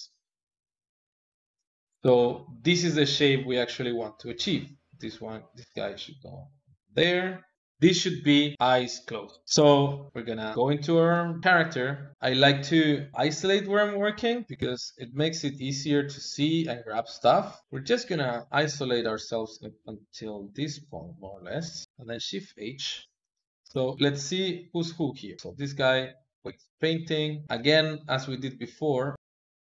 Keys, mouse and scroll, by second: 0.1 click, 4.1 click, 4.6 click, 5.6 click, 7.5 click, 9.9 click, 10.9 Tab, 12.8 click, 14.4 ctrl+KP_Add, 14.9 ctrl+KP_Add, 15.3 ctrl+KP_Add, 15.6 ctrl+KP_Add, 16.1 ctrl+KP_Add, 17.6 ctrl+KP_Subtract, 19.6 alt+shift+click, 20.6 alt+shift+click, 21.8 alt+shift+click, 22.0 shift+h, 23.0 click, 23.8 ctrl+Tab, 24.8 click, 25.6 ctrl+Tab, 28.9 ctrl+Tab, 29.2 ctrl+Tab.